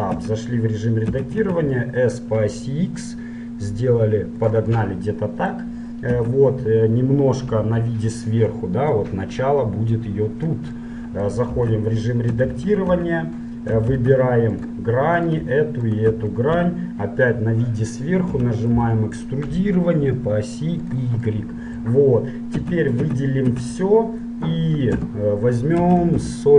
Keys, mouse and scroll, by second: 0.4 Tab, 1.4 s, 5.0-6.8 middle drag, 6.4 Tab, 7.6 KP_7, 8.3 middle click, 9.2-11.0 drag, 11.0-12.8 middle drag, 11.7 ctrl+Tab, 12.6 ctrl+Tab, 14.0 ctrl+Tab, 15.4-17.9 right drag, 16.8 KP_7, 18.4 e, 21.5 middle click, 22.7 a, 23.3 a, 23.6 z, 25.0 space.